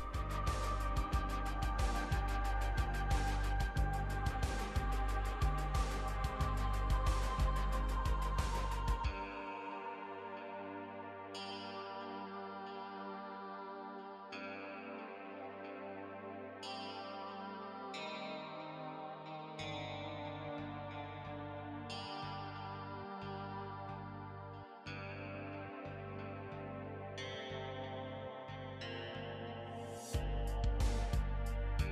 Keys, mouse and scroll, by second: 25.7 l.